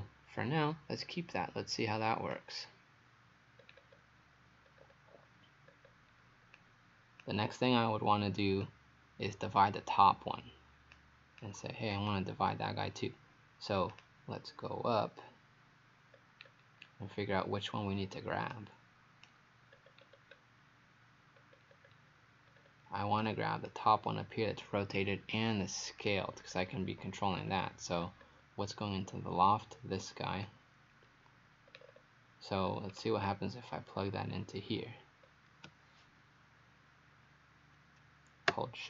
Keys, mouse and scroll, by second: 3.6-3.9 scroll down 2, 4.7-5.7 scroll up 3, 5.7-6.6 scroll down 2, 6.6 click, 16.2-16.7 scroll down 2, 18.5 right click, 19.8-21.4 scroll down 5, 21.4-22.5 scroll up 4, 22.5-23.2 scroll up 3, 23.2 right click, 26.0 click, 26.5-27.0 scroll down 4, 27.3-27.6 scroll up 4, 28.1-28.7 scroll up 1, 29.7 scroll up 1, 30.5 click, 31.7-32.7 scroll down 6, 32.7-33.9 scroll up 5, 34.0 scroll up 2, 35.3-35.6 scroll up 1.